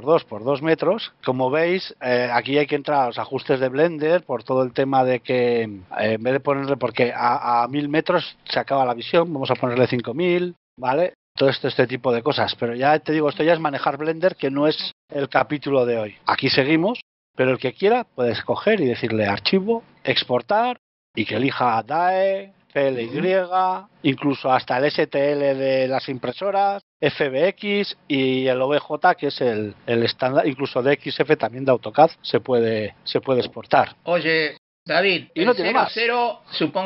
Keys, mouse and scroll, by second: 1.1 shift+middle click, 2.1-2.5 scroll up 2, 2.5 scroll down 1, 3.3 scroll down 1, 5.8 click, 10.6 KP_0, 13.7 shift+middle click, 18.5 click.